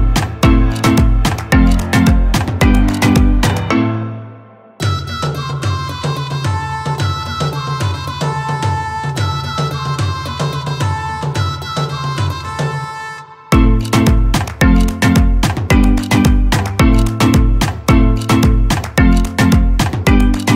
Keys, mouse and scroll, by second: 1.1-3.4 typing, 7.6 click, 11.9 Caps_Lock, 11.9 scroll down 1, 13.4-16.5 scroll up 1, 17.3 Caps_Lock, 17.3-19.0 typing.